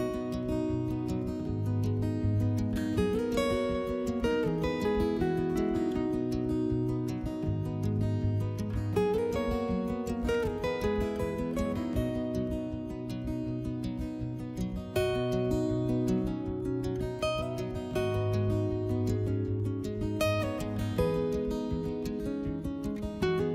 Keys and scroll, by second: 9.3 s, 15.8 s.